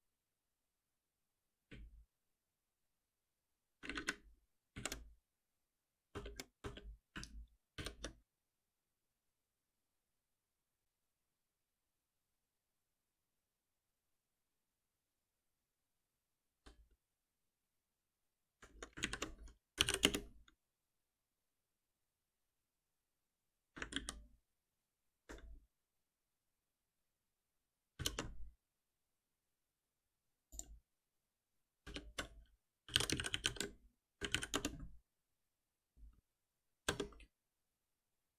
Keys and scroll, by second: 6.1 alt+Return, 7.7 shift+F10, 19.0 ctrl+w, 20.0 Return, 23.9 Return, 23.9 ctrl+shift+Down, 27.9 ctrl+shift+Down, 32.8 shift+F6.